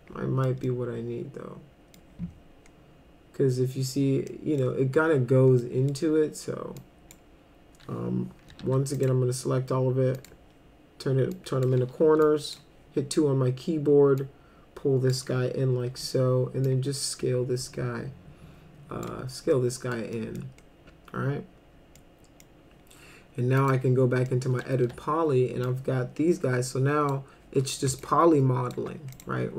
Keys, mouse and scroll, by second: 0.6-1.9 middle drag, 4.3 middle click, 5.6 middle drag, 6.8-7.1 drag, 8.6 ctrl+a, 8.9 right click, 10.2 click, 11.3-11.6 drag, 12.0 2, 12.2-12.5 drag, 14.2 click, 15.9 r, 16.7-19.1 drag, 19.5 middle click, 20.1 middle click, 22.0-22.4 middle drag, 23.6 click, 24.3-24.6 middle drag, 24.8 1, 25.7-27.1 drag, 28.0 alt+click, 29.1 right click.